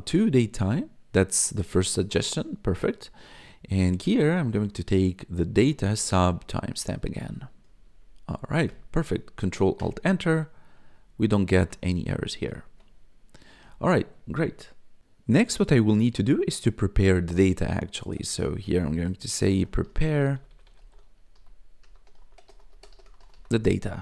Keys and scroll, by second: 0.5 Tab, 3.1-7.1 typing, 7.6 Right, 8.6 Return, 9.7 ctrl+alt+Return, 11.6 BackSpace, 12.5 ctrl+alt+Return, 19.0-23.8 typing.